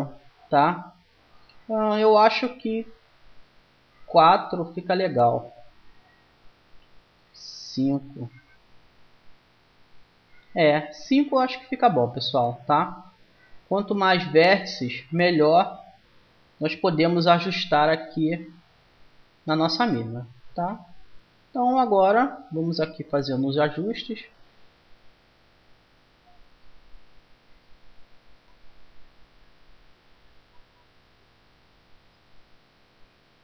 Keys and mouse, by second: 2.3-6.1 drag, 7.0-8.7 drag, 14.2-16.0 drag, 16.0-17.5 middle drag, 17.1 g, 19.3-20.3 middle drag, 20.3 click, 20.7-22.3 right drag, 20.7 g, 23.9 middle click, 24.1 click, 24.1-25.6 right drag, 25.1 g, 25.6 click, 25.7 right click, 28.2-29.9 right drag, 29.9 click, 32.7-33.4 middle drag.